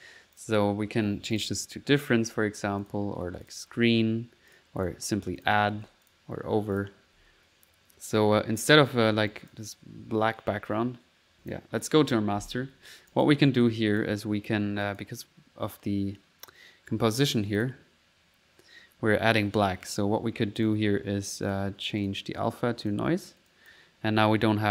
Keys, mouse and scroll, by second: 0.4 click, 1.4 click, 1.8-2.3 typing, 2.9 click, 3.5 click, 3.8 typing, 4.6 click, 4.9 click, 5.4 click, 5.8 1, 6.1 click, 6.8 click, 7.0 1, 8.7 click, 9.1 click, 9.1 middle click, 9.4 click, 10.0 middle click, 11.4 click, 13.2 click, 13.6 typing, 13.7 click, 14.9 click, 15.3-16.5 middle drag, 17.6 click, 20.0 click, 20.6 click, 21.5 click, 22.1 click, 22.9 click, 23.5 click, 24.2 click.